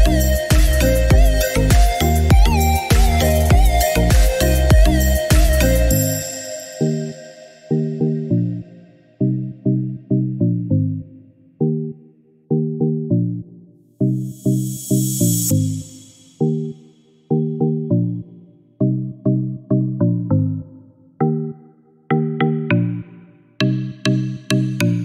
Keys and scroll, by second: 5.9 Escape.